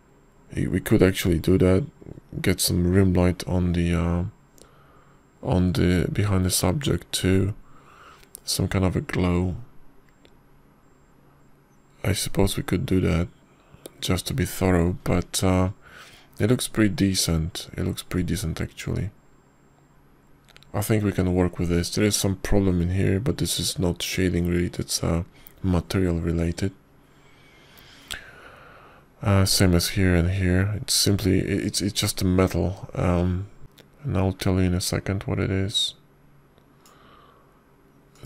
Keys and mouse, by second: 34.6 click, 37.7 click.